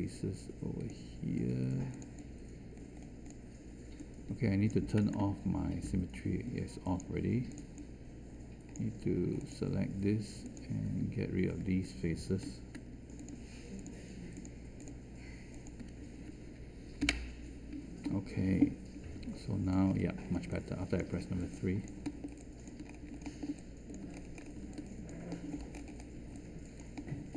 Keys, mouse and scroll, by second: 12.4 q, 17.0 Delete, 19.1 3.